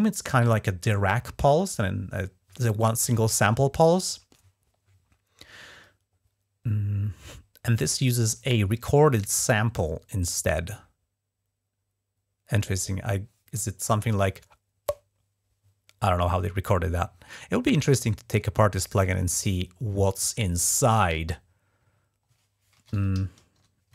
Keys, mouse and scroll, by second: 20.2 ctrl+`, 22.6-23.9 typing, 23.3 Return.